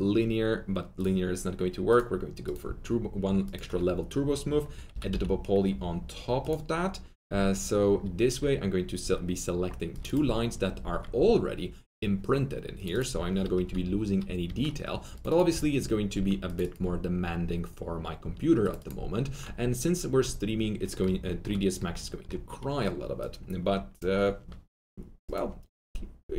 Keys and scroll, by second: 4.6-5.5 typing, 8.3 2, 13.5 2, 14.4 F3.